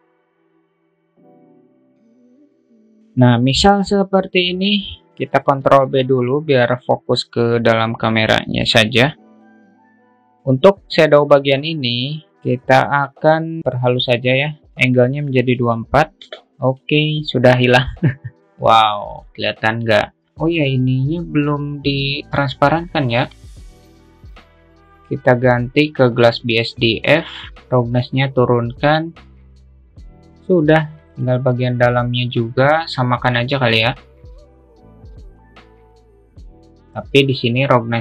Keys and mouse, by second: 0.7 click, 0.9 click, 1.0 ctrl+z, 1.2 ctrl+z, 1.2 click, 1.4 click, 2.0 click, 2.1 ctrl+z, 2.3 ctrl+shift+click, 6.1 ctrl+b, 14.7-16.5 drag, 21.0 click, 23.5 click, 24.7-26.7 drag, 27.9-30.1 drag, 31.6 click, 33.8 drag, 34.3 click, 35.6 click.